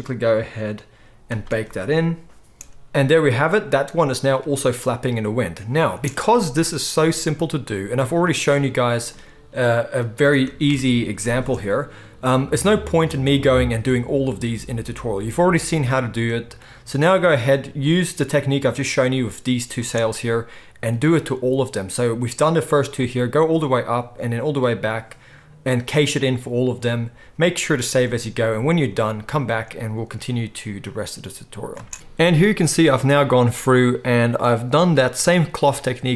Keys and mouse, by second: 2.6 space, 6.0 space, 9.1 space, 10.2 space, 10.8 shift+Left, 11.4 space, 13.1 space, 19.8 space, 31.8 space, 34.7 space.